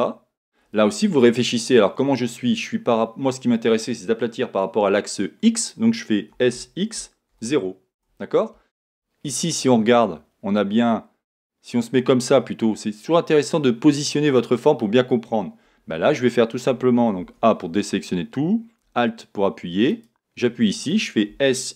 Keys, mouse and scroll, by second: 6.3 s, 9.6 Return, 11.4-19.9 middle drag, 19.9 alt+click, 21.3 s.